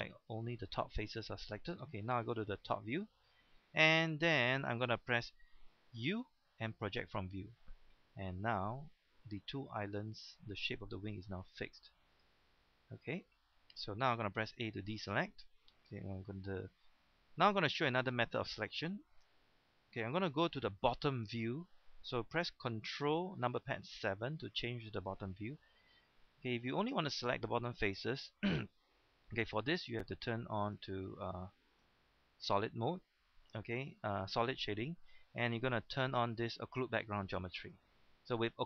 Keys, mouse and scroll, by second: 2.1 KP_7, 2.9-3.5 scroll down 1, 3.5-3.9 scroll up 1, 3.9 shift+middle click, 6.0 u, 7.0 click, 9.9 g, 12.1 click, 14.9 a, 23.9 ctrl+KP_7, 26.6-28.0 middle drag, 30.6 click.